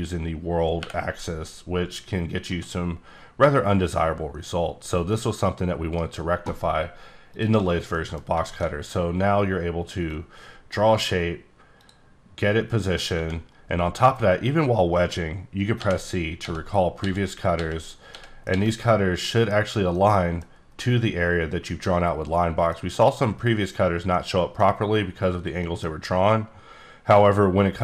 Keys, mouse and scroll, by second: 0.8 y, 2.4 z, 5.1 right click, 5.9 right click, 6.4-7.3 scroll down 1, 7.3 click, 7.9 middle click, 8.4 middle click, 10.1 click, 11.8 click, 15.8 c, 16.4 c, 17.0 c, 17.5 c, 18.1 middle click, 18.7 c, 19.2 middle click, 23.8 scroll down 2, 24.1 middle click, 25.6 middle click, 25.9-27.8 scroll up 2.